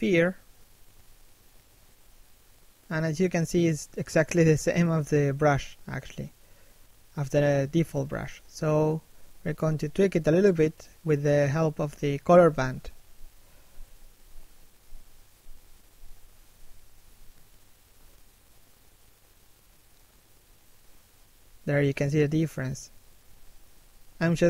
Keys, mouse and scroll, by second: 1.6 f, 3.0 right click, 12.3 f, 14.0 right click, 15.1 f, 15.7 right click, 17.1 f, 17.6 right click, 19.4 f, 20.8 right click, 21.6 f, 22.3 right click, 23.7 f, 24.1 right click.